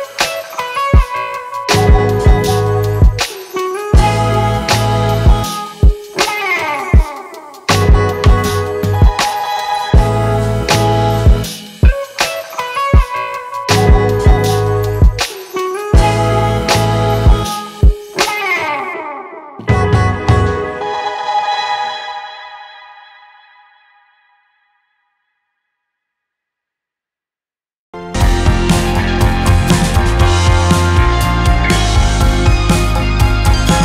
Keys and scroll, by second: 4.4 ctrl+t, 29.0 Down, 30.4 Down, 31.4 ctrl+z, 32.4 ctrl+z, 32.7 ctrl+t.